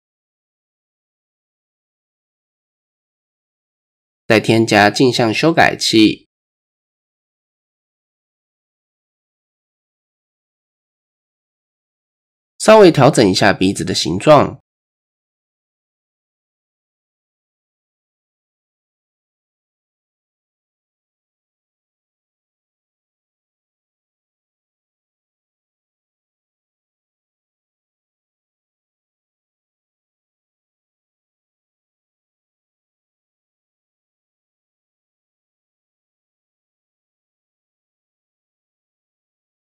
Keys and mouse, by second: 0.4 middle click, 1.5 middle click, 4.5-5.7 drag, 7.8 click, 8.2 click, 8.7 middle click, 9.4 shift+middle click, 10.1-11.1 middle drag, 12.1 middle click, 14.1 middle click, 15.1 click, 17.1 click, 18.4 ctrl+z, 18.6-19.3 middle drag, 19.5 middle click, 21.5 click, 23.5 drag, 26.7 ctrl+z, 29.7-32.4 drag, 34.7-35.7 middle drag, 36.3 middle click, 37.5 click, 38.6 click, 39.2 click.